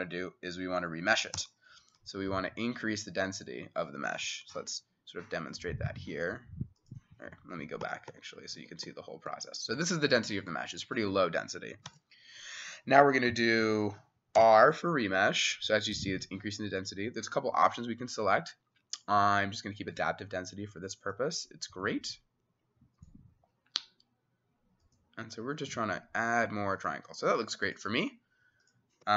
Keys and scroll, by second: 1.4 r, 4.5 w, 7.4 Escape, 7.9 Escape, 8.1 Escape, 8.6 Escape, 8.9 Escape, 9.3-11.9 Escape, 11.9 ctrl+a, 14.4 r.